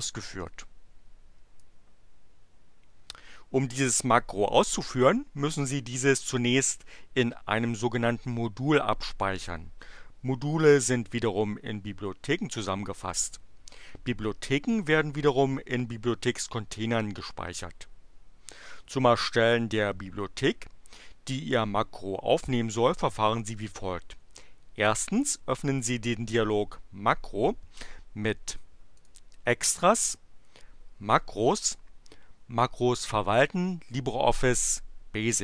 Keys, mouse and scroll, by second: 0.4-1.7 drag, 29.0 click.